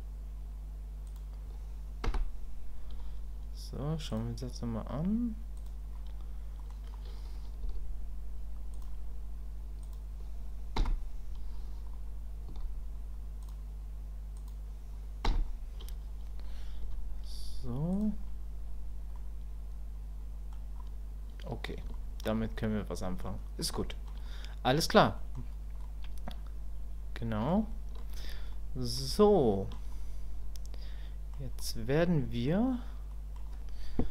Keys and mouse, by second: 4.2-5.2 drag, 5.6 click, 6.6 middle click, 19.1-20.5 middle drag, 21.9 shift+middle click, 22.5 middle click, 23.8 shift+middle click, 24.2 middle click, 25.2 middle click, 25.8-27.5 middle drag, 27.7 shift+middle click, 28.5 middle click, 29.2 shift+middle click, 29.9-31.3 middle drag, 31.6 middle click, 33.2 middle click.